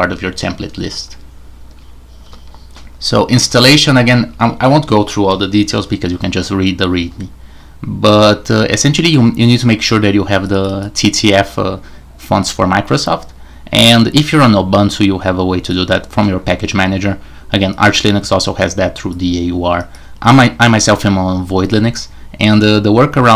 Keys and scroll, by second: 2.2 q, 3.4 super+1, 4.2 j.